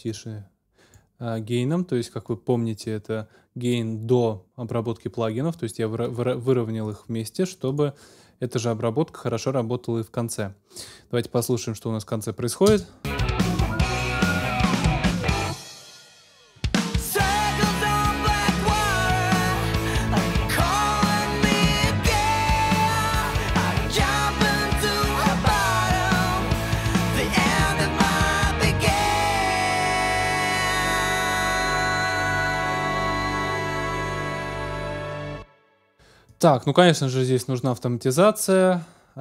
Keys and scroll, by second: 12.7 space, 35.0 space.